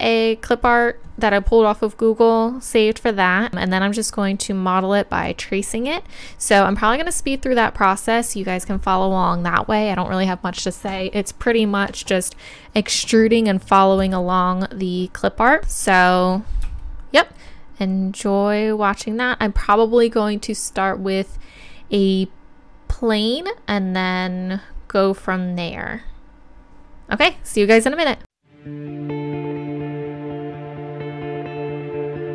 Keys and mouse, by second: 16.0-28.6 middle drag, 28.6 click, 28.7 shift+a, 29.0 click, 29.2 middle click, 29.2 n, 29.3 n, 29.6-30.1 drag, 30.5 click, 30.8 KP_7, 31.5 Tab, 31.9 g, 32.2 click.